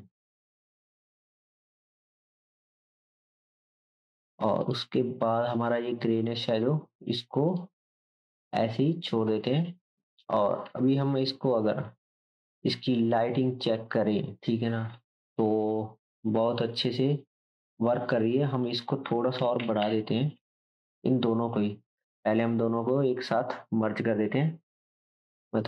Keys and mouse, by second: 4.0-4.6 drag, 4.7-6.6 drag, 7.6 click, 8.0-9.5 drag, 10.7 ctrl+s, 16.2-17.5 drag, 20.8 ctrl+z, 22.0-25.6 shift+drag.